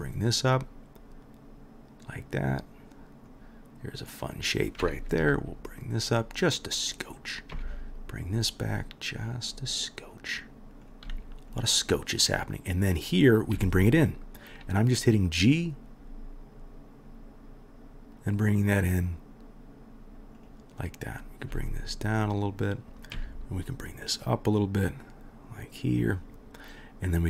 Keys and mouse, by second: 4.2 middle click, 4.2-10.8 right drag, 5.2 g, 7.5 g, 10.8 middle click, 10.9-12.2 right drag, 11.1 g, 12.2 middle click, 12.3-27.2 right drag, 13.2-13.5 drag, 13.2-13.5 middle drag, 13.5 g, 21.1 click, 21.1 middle click, 21.5 g, 23.1 g, 27.1 click, 27.1 middle click.